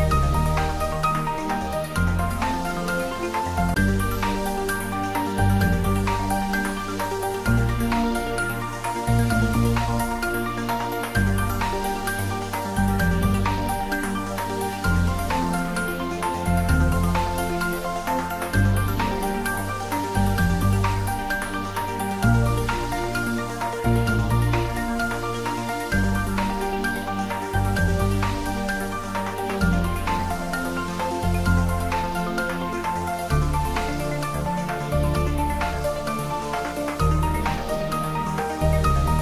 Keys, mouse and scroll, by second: 2.3 click, 6.0 click, 10.2 click, 17.0 click, 23.7 click, 24.3-24.8 scroll down 1, 26.5-28.3 scroll down 1, 35.4-36.5 scroll down 1, 38.1 click.